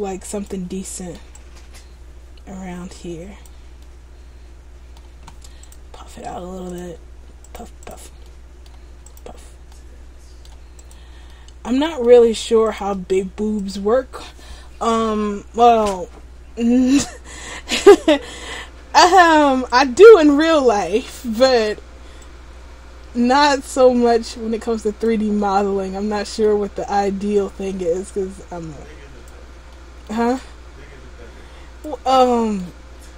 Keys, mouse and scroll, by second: 0.8 middle click, 1.5 click, 3.9 middle click, 5.7 click, 7.6 click, 7.9 click, 8.3 middle click, 9.2 click, 9.8 middle click, 11.0 click, 11.4 middle click, 12.8 click, 17.3-17.9 scroll down 1, 17.9-19.2 scroll down 2, 19.2 click, 19.2-19.9 scroll down 1, 19.9 click, 20.6 middle click, 22.3 click, 25.5 middle click, 27.5 click, 29.8 middle click, 30.5 click, 32.2 middle click.